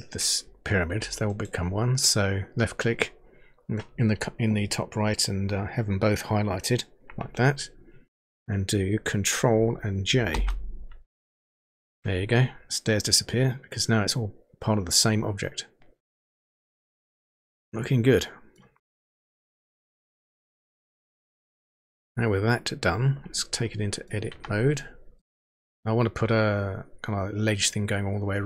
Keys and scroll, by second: 10.3 ctrl+j, 24.3 Tab.